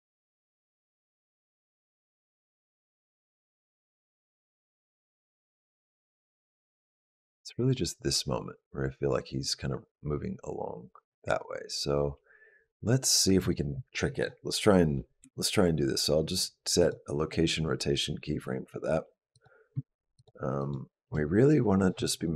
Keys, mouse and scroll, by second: 19.1 click, 20.0 shift+click, 20.4 click.